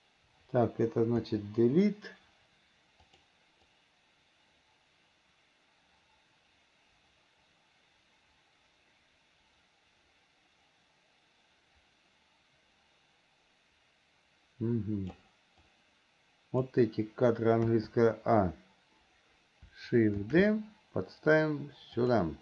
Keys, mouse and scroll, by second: 3.4 click, 3.9-15.5 drag, 15.9 click.